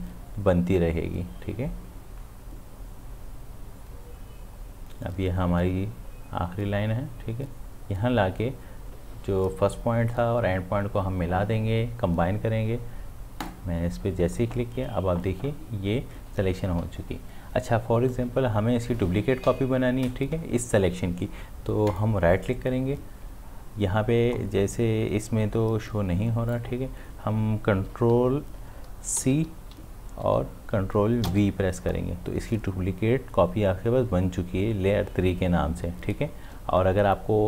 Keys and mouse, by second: 13.4 click, 21.9 right click, 26.5 click, 29.2 ctrl+c, 31.3 ctrl+v.